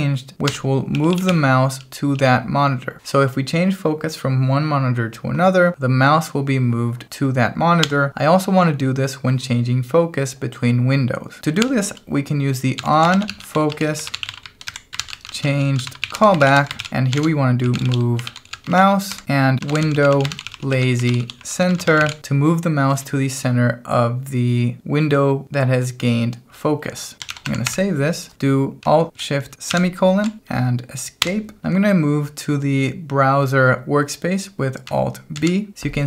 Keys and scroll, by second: 0.5 Escape, 0.7-1.7 typing, 7.8 Escape, 11.6 o, 12.7-22.6 typing, 27.1-27.9 typing, 29.7 alt+shift+;, 31.2 Escape, 35.3 alt+b.